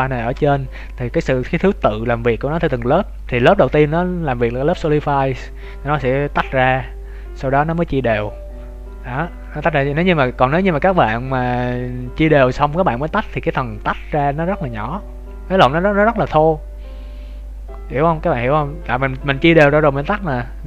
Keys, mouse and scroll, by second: 10.9 click.